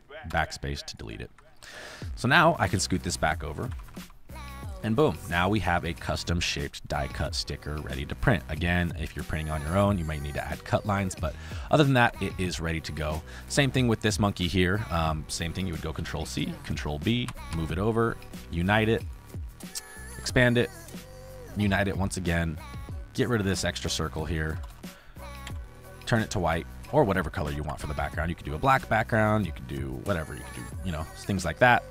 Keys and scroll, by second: 0.2 BackSpace, 2.4 space, 3.6 Left, 4.9 space, 5.9 space, 7.3 space, 8.1 space, 9.2 space, 12.7 space, 15.9 ctrl+c, 16.6 ctrl+b, 17.2 Right, 20.0 ctrl+q, 23.3 a, 24.5 BackSpace, 25.4 v, 27.4 Left.